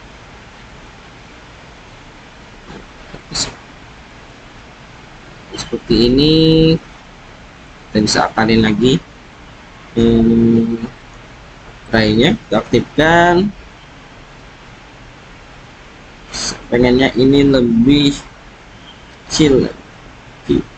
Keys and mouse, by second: 2.2 click, 3.9 click, 5.0 Tab, 7.2 click, 9.3 s, 11.1 alt+z, 12.6 KP_1, 15.4-16.6 drag, 18.3 s.